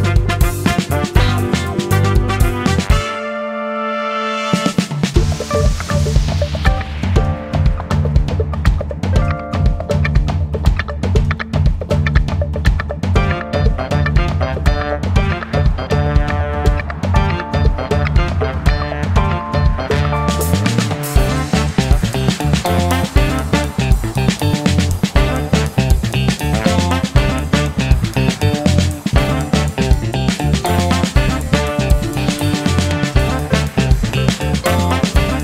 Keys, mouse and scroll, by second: 4.1 click, 6.3 click, 8.8 click, 9.8-10.8 drag, 10.9 ctrl+z, 11.8 click, 12.9 click, 14.1 click, 14.8 KP_Add, 16.0 scroll up 2, 17.9 click, 21.4-22.2 drag, 23.0 click, 24.8 click, 25.9 click, 29.2 click, 30.5 KP_Subtract, 31.7 click, 33.7 click.